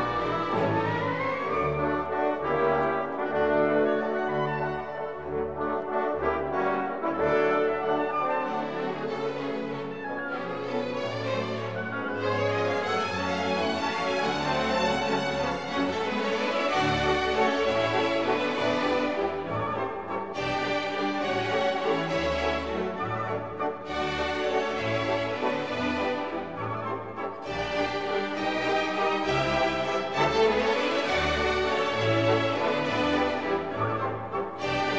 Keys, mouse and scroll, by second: 0.1 middle click, 0.3 shift+middle click, 0.5 middle drag, 1.5 middle drag, 1.9 shift+middle click, 2.3 middle click, 2.7 KP_Divide, 2.8 middle drag, 3.1 Tab, 3.2 2, 3.4 alt+click, 5.3 Tab, 5.3 middle drag, 5.8 KP_Divide, 6.4 Tab, 6.5 middle click, 6.9 KP_Divide, 7.2-8.9 typing, 8.0 click, 9.2 KP_Divide, 9.5 Tab, 9.7 click, 9.8 middle click, 10.1 Tab, 10.2 shift+middle click, 10.5 2, 10.9 ctrl+r, 11.6 Tab, 11.8 middle drag, 12.1 Tab, 12.3 g, 12.8 Tab, 13.0 middle click, 13.3 shift+middle drag, 13.4 middle click, 13.6 click, 14.4 KP_7, 15.0 shift+d, 15.8 middle click, 16.1 x, 16.7 middle drag, 17.6 n, 19.3 click, 19.5 middle drag, 20.2 shift+c, 21.1 KP_Decimal, 24.0-27.8 drag, 26.3 BackSpace, 28.2-28.9 drag, 29.6 middle click, 29.9 KP_7, 30.4 shift+z, 31.2 r, 33.5 shift+r.